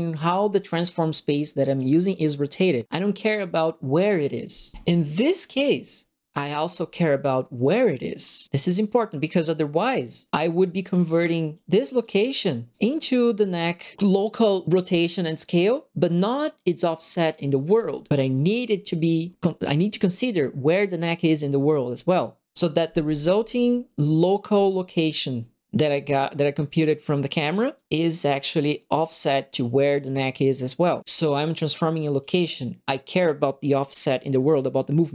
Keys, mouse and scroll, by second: 1.3 click, 5.4 right click, 6.5 click, 8.7 right click, 11.5 click, 12.4 click, 13.3 click, 24.6 right click, 25.3 right click, 25.6-26.8 drag, 27.7 click, 28.2 click, 29.9 click, 32.1 click.